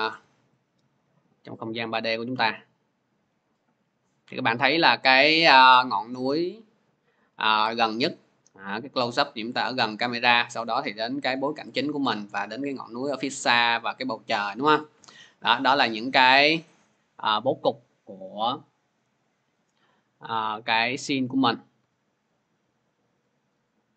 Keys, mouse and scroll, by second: 0.6 scroll, 16.5-20.5 drag, 20.6-21.6 typing, 21.0 click, 23.3 click.